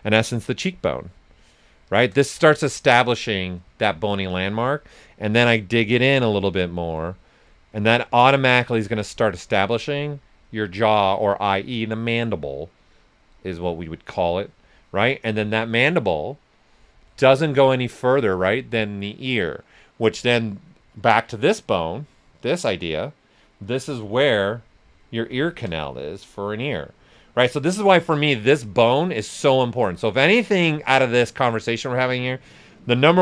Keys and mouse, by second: 0.6 shift+click, 2.2 ctrl+right click, 4.8 alt+click, 9.7 right click, 10.4-11.2 typing, 13.9 click, 16.7-17.4 typing, 21.0 click, 21.0 typing, 24.1 s, 24.2 click, 25.0 right click, 25.4 ctrl+right click, 25.9-27.9 alt+drag, 27.9 right click, 29.2 click, 29.8 s, 29.9 click, 32.9 shift+click.